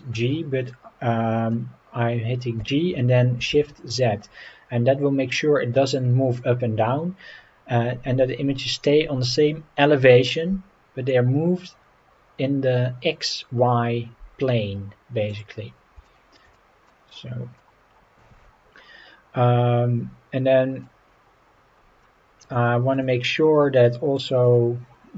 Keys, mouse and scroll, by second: 0.8 scroll up 1, 2.6 g, 3.5 shift+z, 15.3-15.7 drag, 15.7 scroll down 2, 16.0 shift+middle click, 16.5-16.9 middle drag, 17.0 scroll up 3, 17.6-20.8 middle drag, 21.4-22.0 scroll up 3, 22.0-22.4 middle drag, 22.6 shift+middle drag, 24.4-25.1 drag.